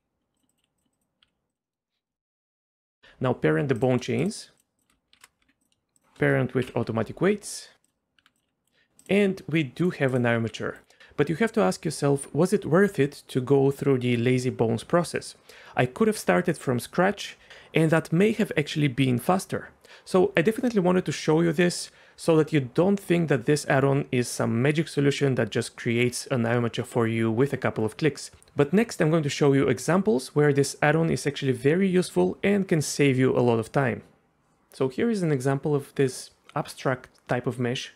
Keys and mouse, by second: 0.0-1.2 typing, 0.5 click, 1.0 click, 1.6 middle click, 1.9 middle click, 2.1 shift+middle click, 2.3 click, 2.8 ctrl+p, 3.8 click, 5.1 ctrl+p, 5.4 Tab, 6.0 shift+click, 6.6 ctrl+p, 8.2 Tab, 8.3 click, 8.4 r, 8.6 right click, 9.2 r, 9.8 right click, 10.4 r.